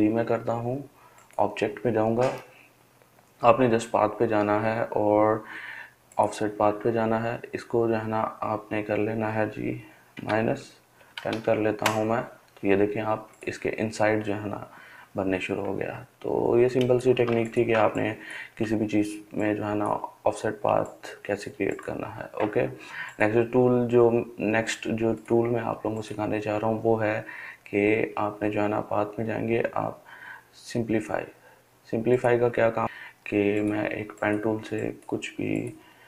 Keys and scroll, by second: 9.9-11.4 typing, 16.3 typing.